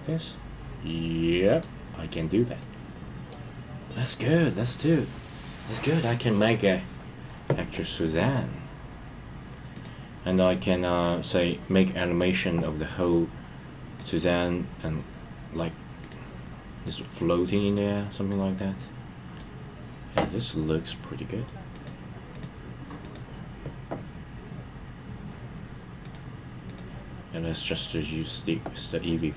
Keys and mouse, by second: 0.8 middle click, 2.6 middle click, 9.7 click, 11.4 click, 11.6-12.2 drag, 13.9 click, 16.0 click, 17.2-19.4 middle drag, 22.3-23.1 drag, 26.0-26.8 drag, 27.6-28.5 middle drag.